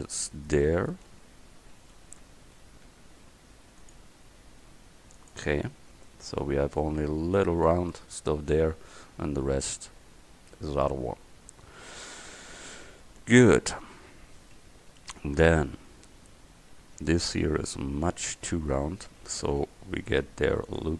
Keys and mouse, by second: 1.1 ctrl+z, 2.9 ctrl+r, 5.8 Tab, 13.6 KP_1, 18.5 Tab, 20.3 ctrl+r.